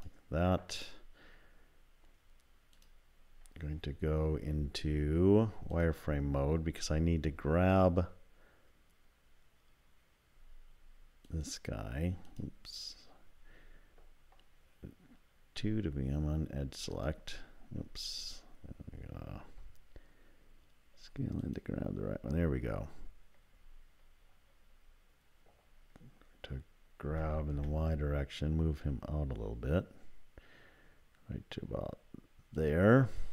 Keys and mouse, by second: 4.3 z, 11.4 ctrl+click, 12.3 click, 27.1 g.